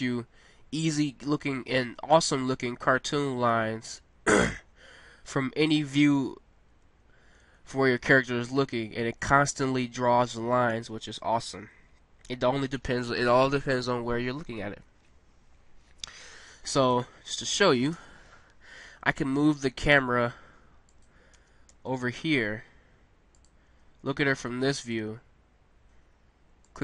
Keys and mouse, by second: 1.0 middle click, 7.0-10.3 middle drag, 14.5-16.8 middle drag, 16.8-17.9 drag, 17.9 KP_0, 18.1 click, 19.9 g, 21.3 r, 23.7 g, 26.7 click.